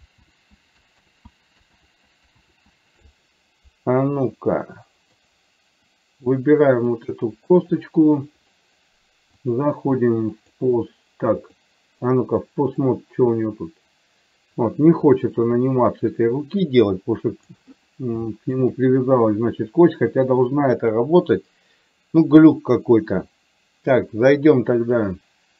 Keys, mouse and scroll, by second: 0.3 ctrl+z, 1.2 ctrl+z, 2.0 ctrl+z, 2.6 ctrl+z, 4.5 middle click, 7.1 click, 9.6-10.7 drag, 11.6 click, 13.1-17.7 drag, 18.3 shift+middle click, 20.8-25.5 drag.